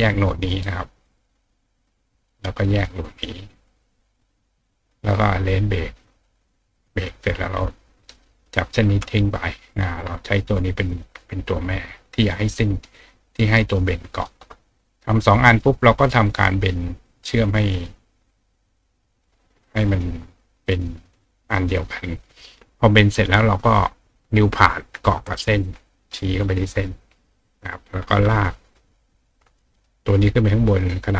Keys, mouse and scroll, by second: 1.2-2.3 drag, 2.8-4.0 drag, 4.1 click, 5.0-6.0 drag, 6.1 click, 6.8 click, 7.2-7.6 drag, 8.4-9.8 drag, 9.9 click, 10.0-13.5 right drag, 10.9 click, 11.4 click, 13.0 click, 16.8-17.8 drag, 19.9 click, 20.8-21.7 drag, 24.1 click, 24.8 click, 25.9 click, 27.6 click, 28.4 click, 29.3 click, 30.8 click.